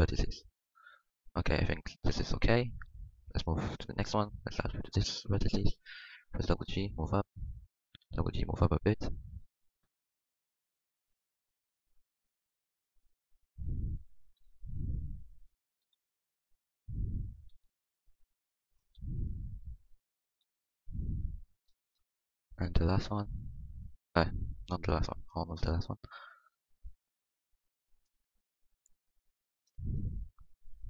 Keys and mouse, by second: 0.0 g, 6.5 g, 8.0 g, 9.4 g, 10.9 g, 12.4 g, 14.4 g, 15.8 g, 17.5 g, 19.5 g, 20.4 g, 23.7 g, 25.7 g, 27.3 g, 28.7 g, 29.3-30.5 middle drag.